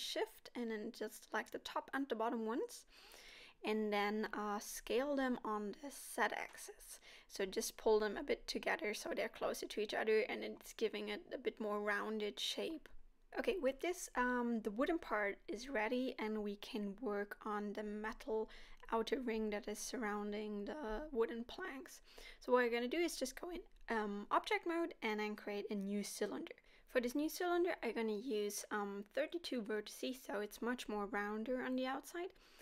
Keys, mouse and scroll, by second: 0.2 middle click, 0.5 alt+shift+click, 2.0 middle click, 2.5 alt+shift+click, 3.0 middle click, 5.2 s, 10.6 g, 14.3 middle click, 19.5 middle click, 20.4-21.2 scroll down 1, 21.2 middle click, 21.9 Tab, 23.2 shift+a, 26.0 scroll down 3, 26.2 middle click, 27.2 KP_7, 30.3 click, 30.3 scroll up 3, 30.9 z.